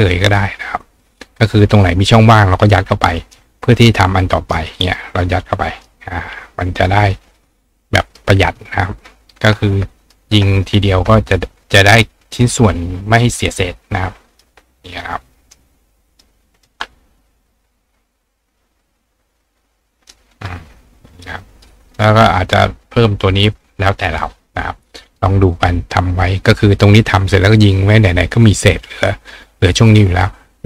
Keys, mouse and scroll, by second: 0.3 click, 2.0-3.3 drag, 3.2 right click, 3.8 click, 4.5 click, 5.8 click, 8.0 click, 8.0 right click, 8.5 click, 10.1 ctrl+click, 10.9-12.0 ctrl+drag, 10.9-15.5 ctrl+right drag, 12.4-14.4 drag, 15.0-16.2 drag, 16.6 click, 18.1-20.1 drag, 19.9-25.2 right drag, 21.8 click, 22.5 click, 25.1-30.6 drag.